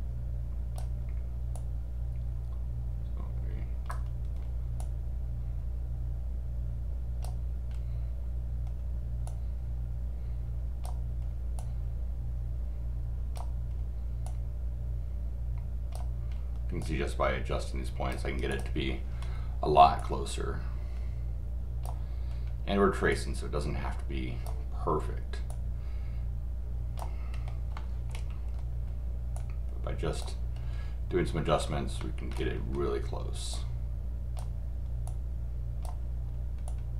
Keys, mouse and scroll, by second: 1.5-3.9 drag, 4.8-7.2 drag, 9.2-10.8 drag, 11.6-13.3 drag, 14.2-15.9 drag, 16.8 click, 18.5 click, 19.0 scroll down 1, 20.0-21.8 drag, 23.1-24.4 drag, 25.5-27.0 drag, 27.3 scroll up 1, 27.7 middle click, 28.4 scroll down 1, 29.3 click, 31.5-32.3 scroll up 2, 33.5 click, 35.0 click, 36.7 click.